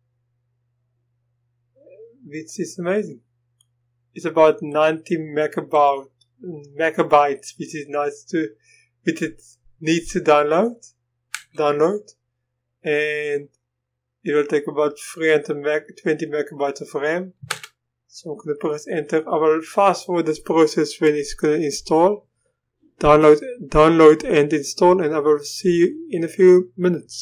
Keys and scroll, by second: 11.4 Return, 17.5 Return.